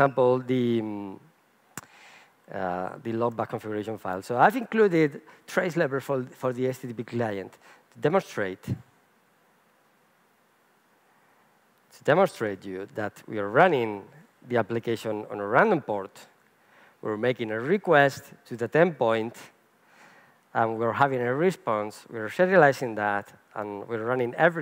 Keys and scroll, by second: 0.7 shift+super+o, 3.3 shift+super+o.